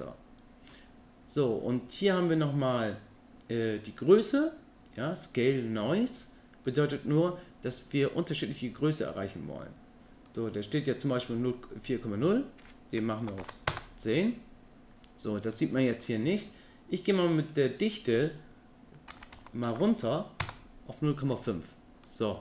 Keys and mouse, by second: 6.9-14.5 drag, 15.8 middle click, 17.5-20.5 drag, 22.1-22.4 middle drag.